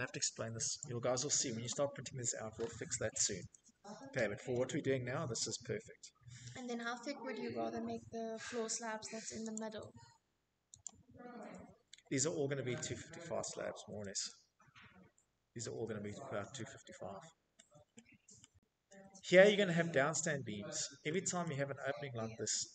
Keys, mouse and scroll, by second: 1.1-1.5 scroll, 1.8 Escape, 2.1 Escape, 2.7-3.1 scroll, 3.6-4.5 scroll, 7.1 middle click, 8.0 middle click, 8.2 click, 9.5 click, 10.3 middle click, 10.3 middle click, 10.4-11.5 middle click, 11.3 middle click, 12.5-12.9 typing, 14.1 Escape, 14.2 middle click, 14.2 i, 14.3 middle click, 14.5 Escape, 16.2 middle click, 17.1 middle click, 17.3 middle click, 17.5 middle click, 17.6 click, 18.6-19.2 scroll, 19.3 click, 19.5 middle click, 20.1 middle click, 21.8 middle click, 22.0 middle click.